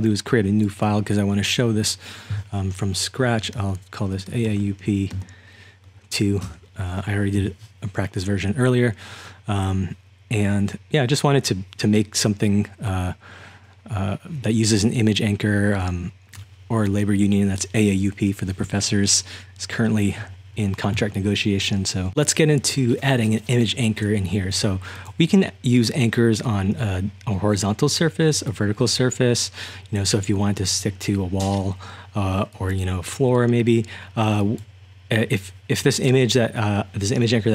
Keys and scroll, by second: 3.6-5.9 typing, 6.5 Return.